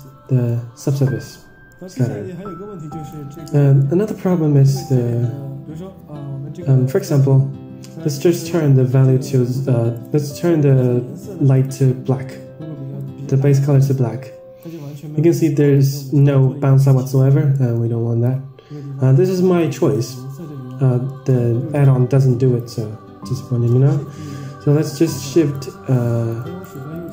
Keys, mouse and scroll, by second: 1.6 middle click, 1.7 Tab, 1.7-2.1 scroll down 3, 3.0 click, 3.8 middle click, 6.2 KP_0, 7.2 click, 8.5 click, 10.2 click, 11.7 drag, 15.7 click, 16.5-17.0 middle drag, 17.5 middle click, 18.2-19.5 drag, 19.9 middle click, 20.3-21.0 scroll up 5, 21.0 middle drag, 24.3-24.8 shift+right drag, 25.8 shift+right click.